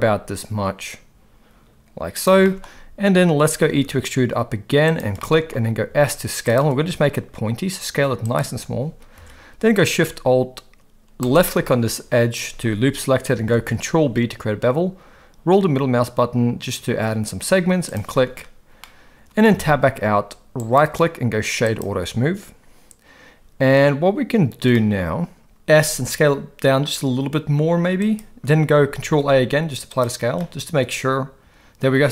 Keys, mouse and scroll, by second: 2.2 g, 2.4 shift+middle click, 3.7 e, 5.3 shift+middle click, 5.8 s, 6.8 s, 9.2 alt+a, 13.5 ctrl+b, 18.8 middle click, 19.5 Tab, 20.6-21.8 right drag, 24.7-25.5 middle drag, 25.8 s, 29.0 ctrl+a, 30.4-31.8 middle drag.